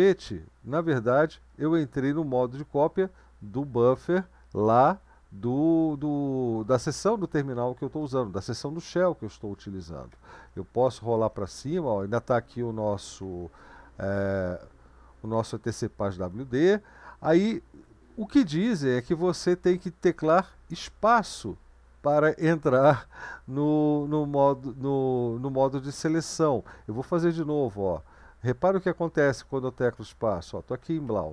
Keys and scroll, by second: 10.4 Up, 10.5 Up, 10.7 Up, 10.9 Up, 11.1 Up, 11.5 Up, 11.6 Up, 12.0 Up, 12.2 Up, 12.4 Up, 12.8 Up, 13.0 Up, 13.4 Up, 13.6 Up, 13.8 Up, 14.0 Up, 14.9 Down, 15.1 Down, 15.3 Down, 15.5 Down, 15.7 Down, 17.2 Left, 18.0 Home, 20.8 space, 27.2 Up, 27.8 Up, 27.8-29.4 Up, 29.7 Down, 29.9 Down, 30.0 Down, 30.2 Down, 30.4 Down, 30.7 Down, 31.0 Up.